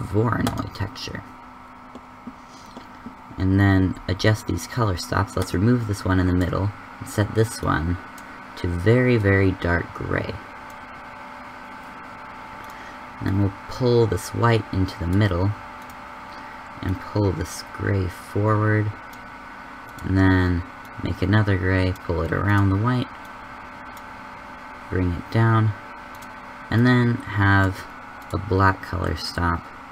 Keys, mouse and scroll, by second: 5.3-8.0 drag, 12.5-15.1 drag, 15.9-18.6 drag, 19.8-21.3 drag.